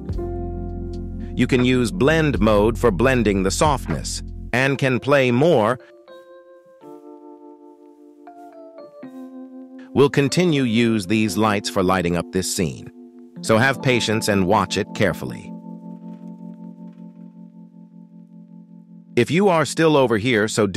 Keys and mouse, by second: 0.0 y, 0.6 shift+middle drag, 2.3-6.1 shift+drag, 6.1 middle click, 9.1-11.4 drag, 9.1 KP_0, 11.4 middle click, 15.7 shift+middle click, 16.6 shift+middle click, 18.6-20.7 drag.